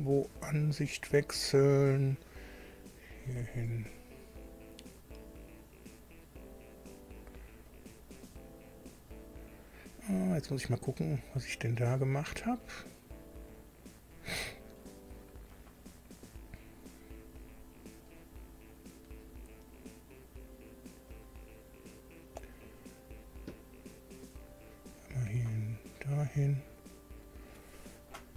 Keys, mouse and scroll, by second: 1.6 click, 2.9-3.3 scroll up 1, 5.9 click, 6.4 right click, 7.7 click, 12.5-14.3 drag, 16.6 click, 17.4 click, 18.1 click, 24.5 click, 25.5 click.